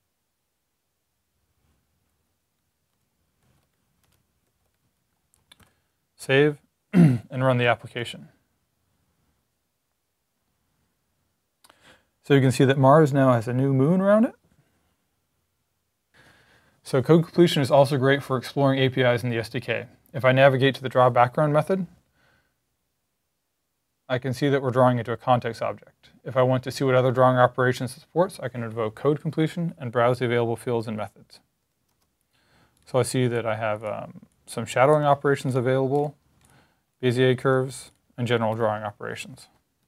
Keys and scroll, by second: 1.6-5.5 typing, 5.6 super+s, 7.2-7.9 typing, 31.9 Up, 38.3 Escape, 39.7 super+Right.